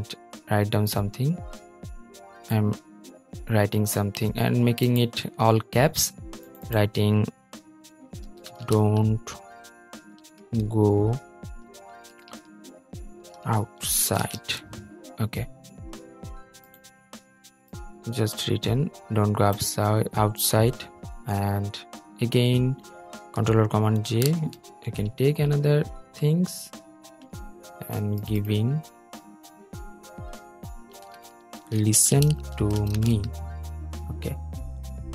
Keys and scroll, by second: 23.7 super+j.